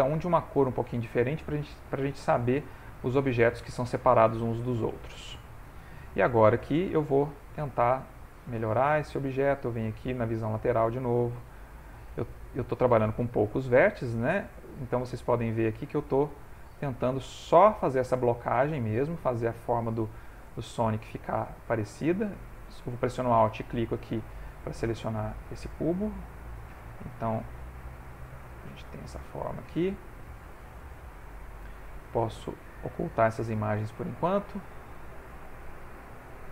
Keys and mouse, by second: 3.3 middle click, 3.5 ctrl+middle click, 4.4 click, 5.4 ctrl+middle click, 6.4 click, 8.3 click, 9.7 click, 10.6 shift+middle click, 11.3 f, 12.1 click, 14.3 click, 15.8 click, 17.1 click, 18.9 click, 20.1 ctrl+middle click, 21.1 shift+middle click, 23.4 alt+click, 25.8 click, 28.0 click, 28.8 click, 29.3 click, 30.0 ctrl+middle click, 32.4 click, 33.7 ctrl+middle click, 34.4 ctrl+middle click.